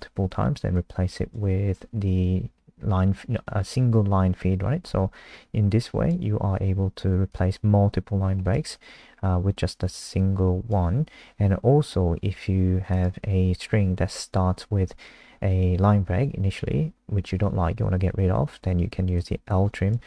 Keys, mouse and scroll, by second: 2.4-5.1 scroll up 1, 5.8 click.